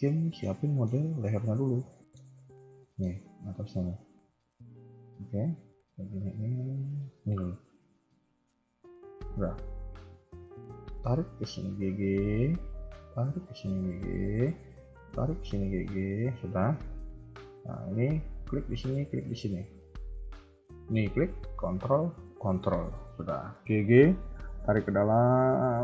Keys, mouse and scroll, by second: 0.1 KP_3, 0.4 middle click, 0.9 scroll up 1, 1.2 middle click, 2.3 a, 2.7 a, 2.8 shift+middle click, 4.3 click, 5.7 g, 13.0 click, 13.3 g, 14.9 click, 15.1 g, 17.4 click, 18.2 a, 18.5 click, 18.5 a, 19.1 ctrl+click, 20.3 a, 20.7 click, 21.9 ctrl+click, 23.1 g.